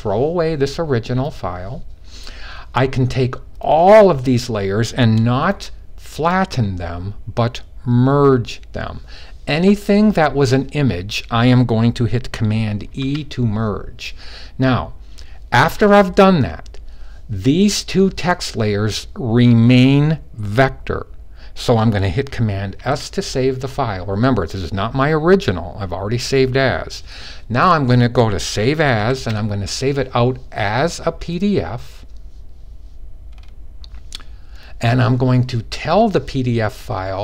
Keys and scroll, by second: 12.7 super+e, 22.5 super+s, 28.8 shift+super+s.